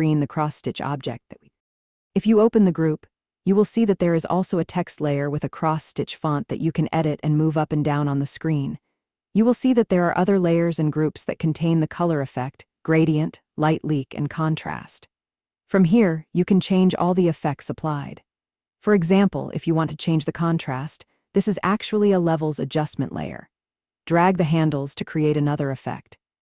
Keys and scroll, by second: 6.8-7.6 typing.